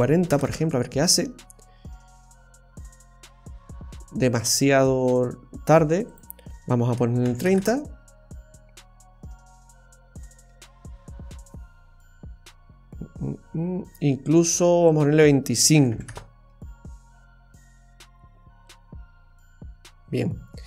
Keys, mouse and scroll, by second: 6.1 click, 14.8 click.